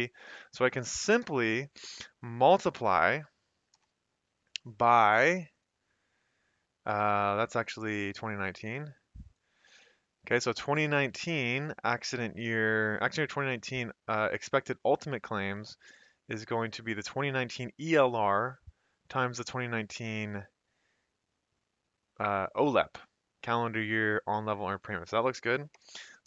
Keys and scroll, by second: 1.2 =, 3.7 *, 7.2 typing, 25.7 Return.